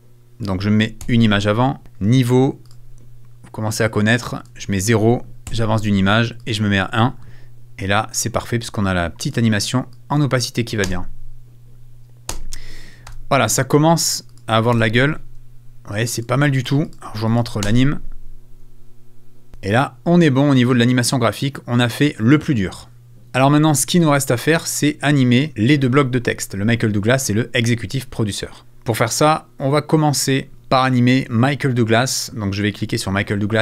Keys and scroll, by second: 1.0 Left, 5.5 Right, 10.8 space, 12.3 space, 13.0 super+space, 13.0 super+f, 14.7 super+f, 17.6 space, 19.5 space, 23.1 super+s, 25.4 space.